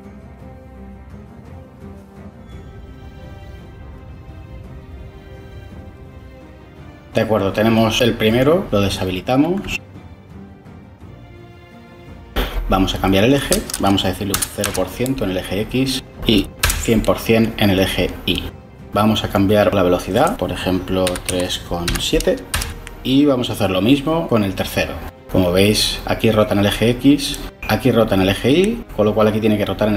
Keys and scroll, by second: 14.2 typing, 15.9 1, 16.5 Return, 20.9-22.2 typing, 22.4 Return.